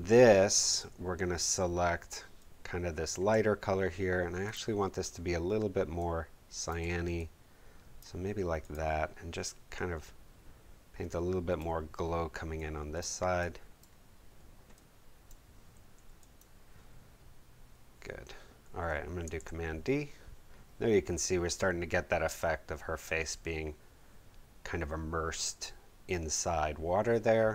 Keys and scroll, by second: 19.0 super+d, 19.3 super+v, 20.3 super+w.